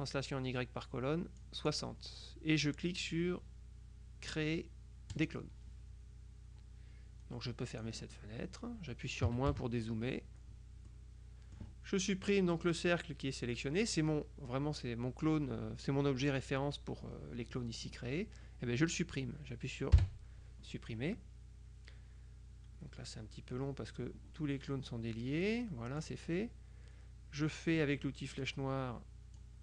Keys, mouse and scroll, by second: 1.5 click, 5.3 click, 7.8 click, 9.3 KP_Subtract, 10.9 click, 11.1 middle click, 20.1 Delete, 25.5 middle click, 25.6 click, 28.4 click, 29.4-29.6 drag.